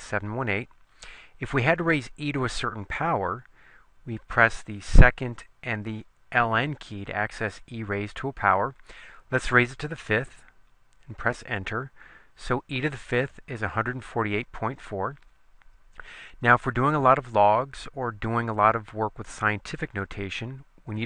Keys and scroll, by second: 10.2 5, 11.4 Return.